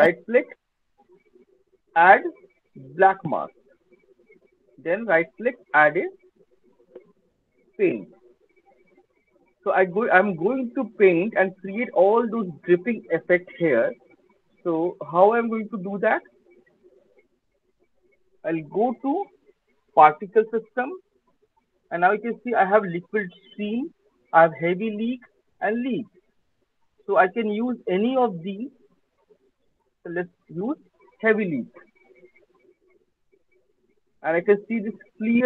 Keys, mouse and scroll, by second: 3.1 click, 8.0 click, 9.6 alt+middle click, 10.0 alt+right click, 10.0 alt+middle click, 10.0 alt+click, 11.2 alt+middle click, 11.2 alt+click, 13.3 alt+middle click, 16.2 alt+click, 16.7 alt+middle click, 20.0 click, 29.5 click, 32.7 alt+click, 33.1 alt+middle click, 35.1 alt+right click.